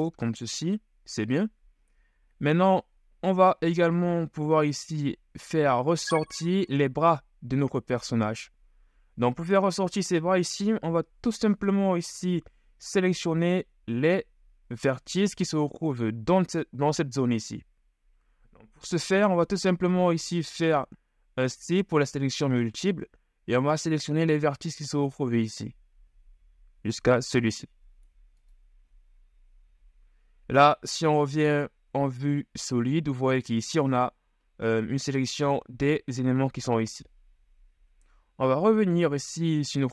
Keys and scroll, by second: 21.6 c, 29.8 z, 38.4 KP_1.